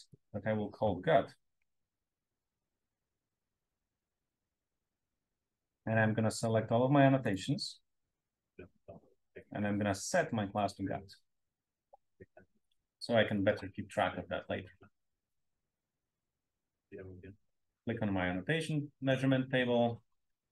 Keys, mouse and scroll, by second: 0.0 click, 1.4-3.6 typing, 4.7 click, 6.3 click, 7.1 shift+click, 8.3 click, 10.5 click, 17.6 click, 19.2 click.